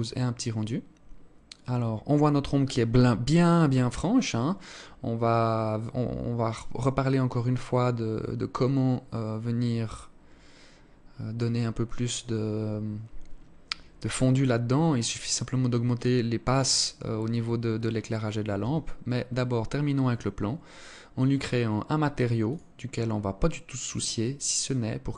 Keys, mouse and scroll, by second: 18.1 Escape, 20.8 click, 22.0 click.